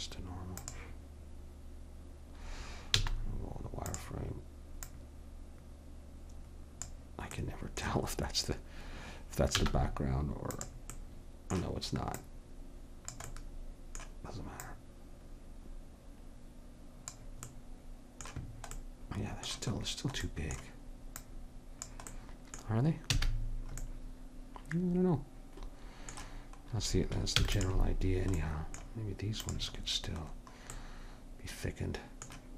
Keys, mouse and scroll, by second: 3.0 z, 4.9 click, 5.8-6.8 drag, 9.6 z, 11.0-12.2 middle drag, 12.2 click, 13.3 middle click, 15.4-16.6 drag, 17.5 middle click, 21.2-22.9 drag, 22.9 middle click, 23.1 a, 23.5-24.7 middle drag, 27.4 ctrl+s, 29.5-32.5 middle drag.